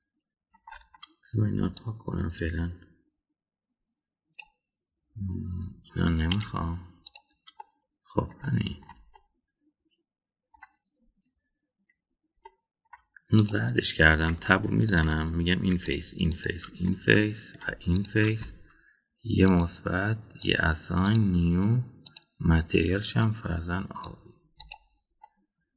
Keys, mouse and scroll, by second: 2.8-5.4 drag, 7.3 Delete, 9.4-9.8 middle drag, 10.1-11.5 middle drag, 13.4 middle click, 14.3 click, 15.3 Tab, 15.8 click, 16.8 shift+drag, 17.3 shift+click, 17.9-19.0 middle drag, 18.9 shift+click, 20.5 drag, 21.3 click, 22.0 drag, 23.0 click, 25.6 click.